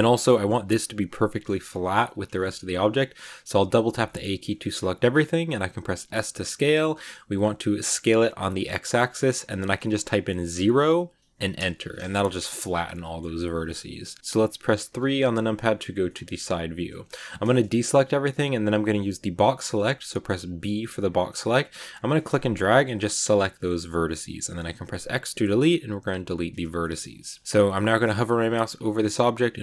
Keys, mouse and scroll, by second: 2.5 scroll down 1, 2.6 a, 2.8 a, 3.6 shift+middle click, 4.3 scroll down 2, 4.5 middle click, 5.0-5.8 scroll up 1, 5.9 s, 11.9-14.2 middle drag, 14.2 KP_1, 15.6 click, 16.0 shift+middle click, 16.1-16.5 scroll up 2, 16.5 a, 20.4 b, 24.3 x, 26.7-29.6 shift+middle drag.